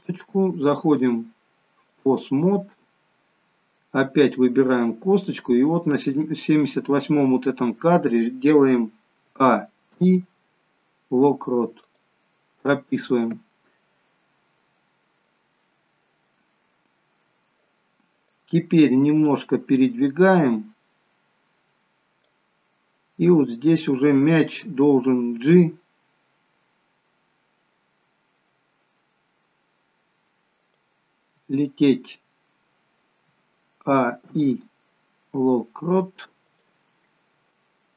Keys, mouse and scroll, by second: 1.0 click, 2.8-3.1 scroll down 2, 4.3 click, 9.3 a, 9.9 i, 14.8 middle click, 15.4-16.1 scroll down 2, 17.8-18.9 scroll down 1, 18.9 click, 25.6 g, 34.0 a, 34.3 i, 37.6 middle click.